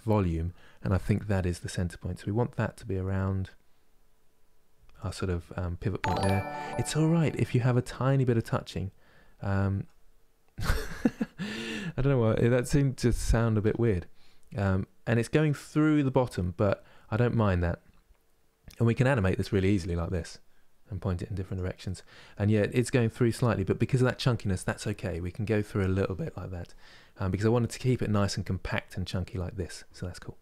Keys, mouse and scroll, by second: 5.7-10.6 middle drag, 11.0 KP_3, 13.3 r, 21.5-26.9 middle drag, 26.9 KP_3, 27.5 middle click, 28.1 scroll down 4, 28.4-30.4 middle drag.